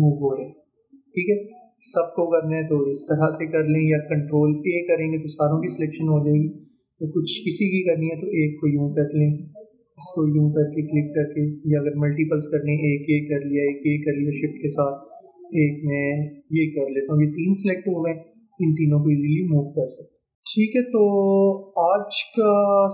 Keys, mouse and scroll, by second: 2.0 ctrl+a, 2.7-4.6 drag, 5.1 ctrl+a, 6.0-10.7 drag, 13.5 shift+click, 16.5 shift+click, 18.2-20.3 drag, 20.3 ctrl+z.